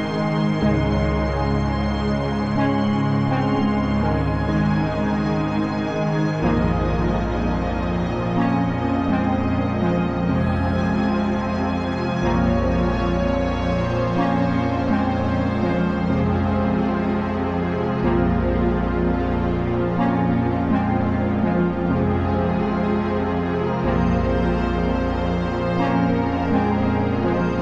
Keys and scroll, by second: 5.7 ctrl+t, 16.2 Return.